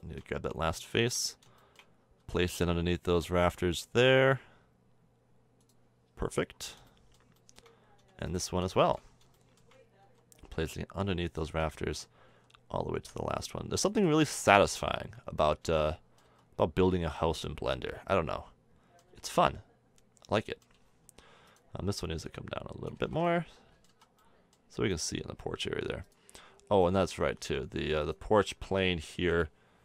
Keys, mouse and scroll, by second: 1.6-5.4 middle drag, 2.2 g, 6.2-7.0 middle drag, 8.2-9.5 middle drag, 10.0 g, 12.3 g, 14.5 a, 14.7 Tab, 15.0 middle drag, 15.4 middle click, 16.2 z, 17.6 middle click, 19.1 z, 19.3 middle click, 19.5 middle click, 19.7 middle click, 21.0 Tab, 22.9 a, 23.0 Tab, 23.9 z, 26.0-26.5 middle drag, 26.8 click, 27.3 Tab, 29.3 middle click.